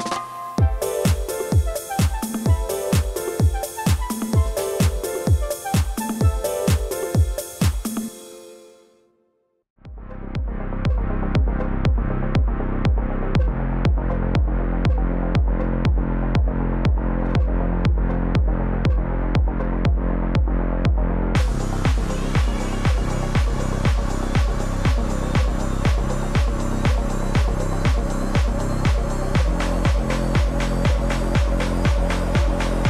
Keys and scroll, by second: 1.8 ctrl+t, 19.3 ctrl+a.